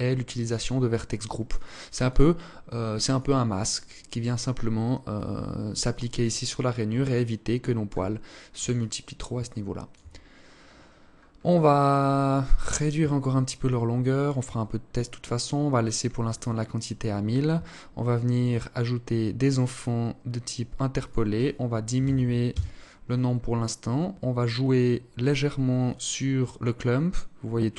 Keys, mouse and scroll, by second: 0.6 click, 1.2 click, 2.2 click, 6.2 alt+click, 7.3-7.8 scroll up 1, 7.9 alt+click, 8.6 alt+shift+click, 10.5-11.2 scroll up 11, 12.3 shift+click, 14.0 scroll down 2, 14.8-16.0 scroll down 8, 17.5 click, 17.9-18.9 scroll down 1, 18.9 click, 18.9-19.7 scroll down 4, 20.2 click, 22.4-24.0 scroll down 1, 24.0 scroll down 1, 25.0 click.